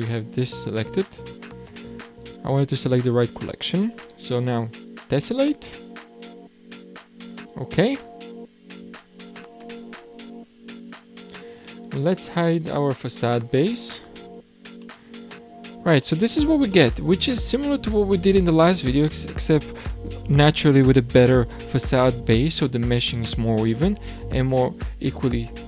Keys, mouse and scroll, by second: 1.1 click, 2.2 shift+click, 5.1-9.3 drag, 10.2-11.7 scroll down 5, 11.7 scroll down 4, 14.0 click, 14.8-17.2 middle drag, 17.2-18.0 scroll down 5, 18.1-18.8 shift+middle drag, 18.8-21.9 scroll up 2.